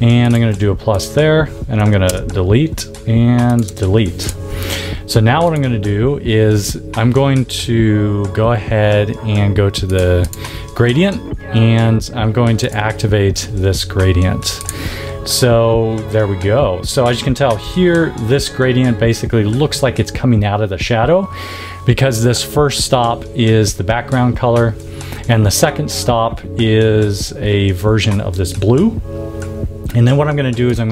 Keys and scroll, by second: 0.4 a, 2.0 BackSpace, 17.5 v.